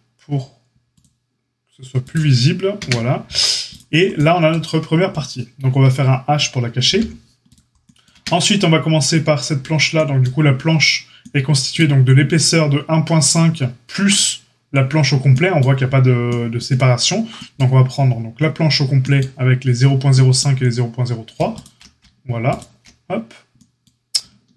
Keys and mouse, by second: 0.9-3.7 drag, 2.7 Tab, 3.7-24.5 middle drag, 6.8 h, 8.1 Tab, 21.5 alt+shift+click.